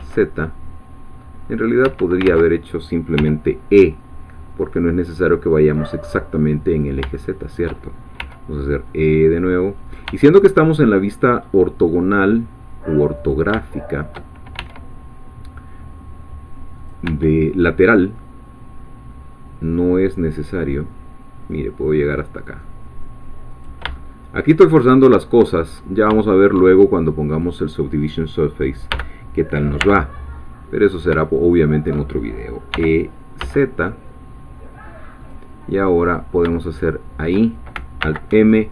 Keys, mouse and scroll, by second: 0.0 z, 1.8 Escape, 2.2 ctrl+z, 3.1 e, 6.7 click, 7.1 shift+middle click, 8.2 e, 9.9 click, 10.1 e, 13.2 click, 13.6 shift+middle click, 14.6 shift+e, 16.8 click, 17.0 e, 23.5 click, 24.4 shift+middle click, 25.8 shift+scroll up 2, 26.2 shift+middle click, 27.3 click, 28.9 g, 29.8 y, 30.8 click, 31.4 shift+click, 32.7 e, 33.4 z, 35.2 click, 36.1 click, 36.8 shift+click, 38.0 alt+m.